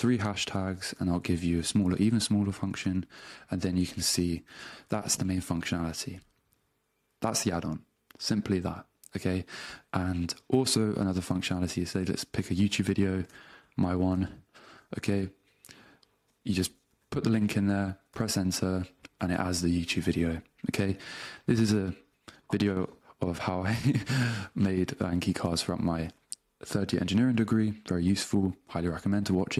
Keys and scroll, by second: 0.5-3.3 typing, 2.9 Return, 4.5 space, 13.4 super+c, 14.1 super+Tab, 16.9 super+v, 18.1 Return.